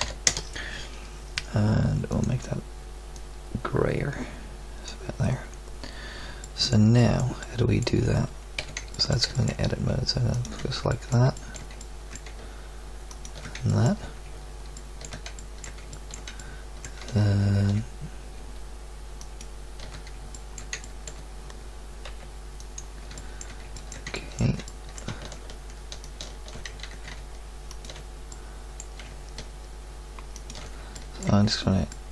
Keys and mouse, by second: 8.6 z, 16.0-19.2 middle drag, 20.3 middle click, 22.1 b, 26.8 ctrl+z, 28.4 middle click.